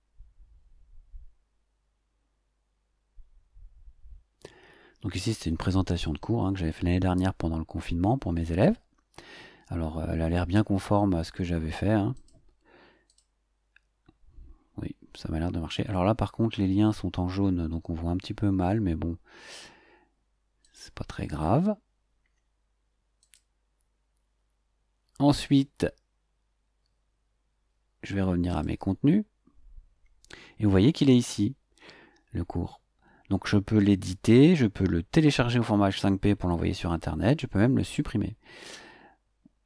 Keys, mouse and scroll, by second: 12.1 click, 13.0 click, 20.6 click, 23.2 click, 28.5 click, 30.7 scroll down 2.